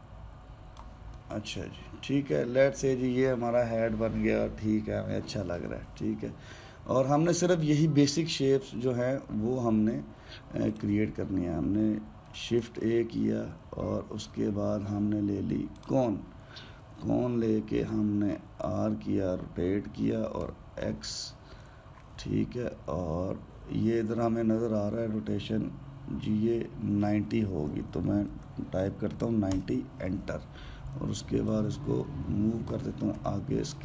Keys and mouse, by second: 1.9-5.0 middle drag, 11.4-13.0 shift+right drag, 13.0 shift+a, 18.5 r, 32.2 drag.